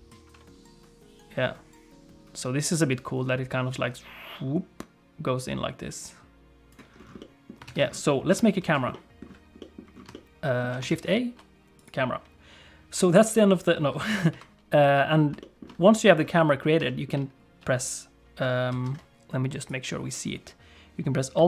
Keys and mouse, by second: 7.2 middle click, 7.7 ctrl+s, 8.3 KP_1, 8.9 middle click, 9.6 middle click, 10.1 shift+middle click, 10.9 shift+a, 14.3 KP_3, 15.4 shift+middle click, 16.8 click, 18.7 alt+z, 19.6 click.